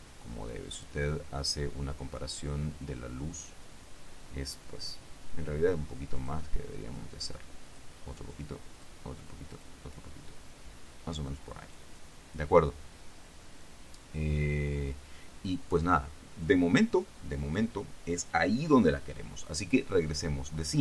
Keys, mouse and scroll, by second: 6.3 click, 7.8 click, 8.9 click, 9.7 click.